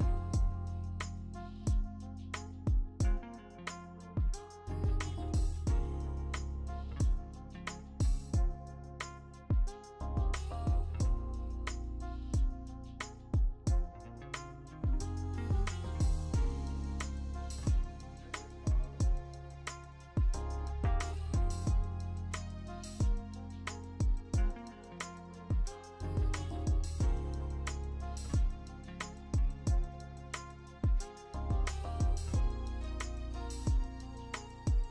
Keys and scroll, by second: 0.6 ctrl+d, 2.0 b, 4.0 ctrl+alt+g, 4.1 ctrl+alt+g, 7.0 ctrl+alt+z, 7.2 ctrl+alt+z, 9.0 ctrl+alt+z, 10.3 e, 10.7 e, 14.0 v, 16.7 ctrl+alt+g, 25.0 Escape.